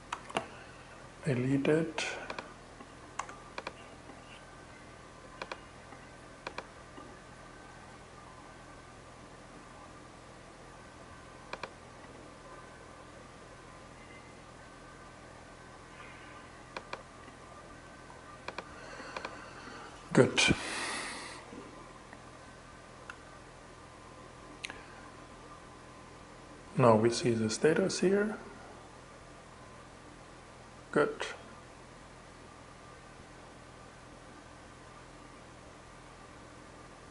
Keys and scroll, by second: 2.6 super+BackSpace, 17.5 super+w, 22.5 shift+Return.